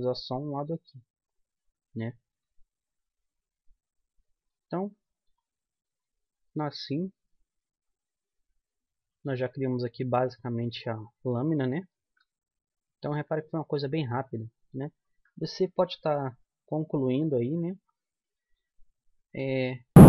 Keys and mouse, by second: 1.1 KP_1, 3.9 x, 12.4 KP_1, 15.9 middle click, 16.1-17.5 middle drag, 16.1 z, 17.9 middle click.